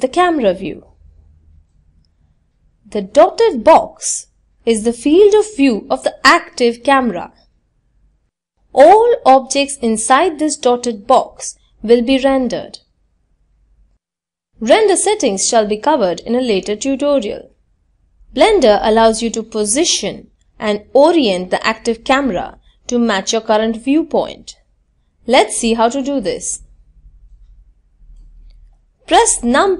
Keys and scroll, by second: 26.9 KP_0.